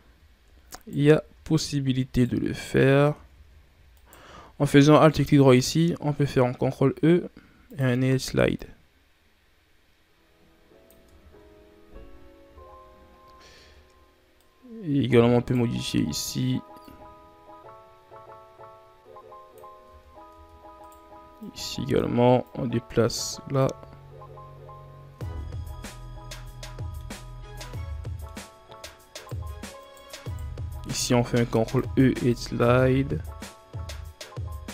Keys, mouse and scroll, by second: 0.5 alt+shift+right click, 1.9 alt+shift+right click, 2.9 ctrl+z, 3.8 alt+shift+right click, 6.4 ctrl+e, 10.9 Tab, 11.3-12.3 scroll down 4, 12.3 a, 13.0-13.4 scroll up 3, 13.4 Tab, 14.2 right click, 16.0 right click, 16.7-19.7 drag, 19.7 Tab, 20.1 Tab, 20.6 right click, 21.2-22.3 drag, 23.5 Tab, 24.2-25.0 scroll down 1, 25.0 Tab, 25.5 scroll down 2, 25.7-26.9 middle drag, 26.9 scroll up 1, 27.5 ctrl+scroll up 2, 27.8 middle click, 28.3 scroll up 2, 28.9 shift+right click, 29.6 shift+right click, 30.1 shift+right click, 30.9 ctrl+e.